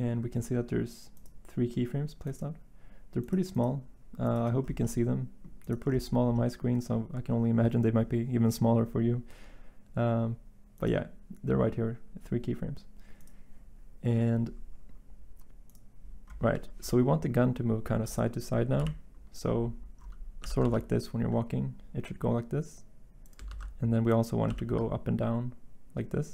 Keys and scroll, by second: 18.7 End, 20.4 g, 20.6 x, 23.4 ctrl+z, 24.4 g.